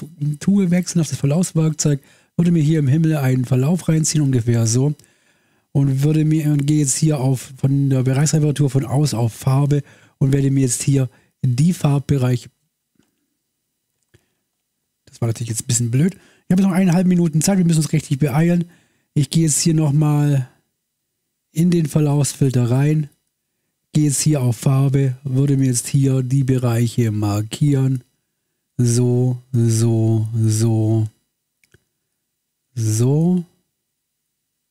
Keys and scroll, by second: 13.1 Escape, 14.3 Escape, 14.5 ctrl+z.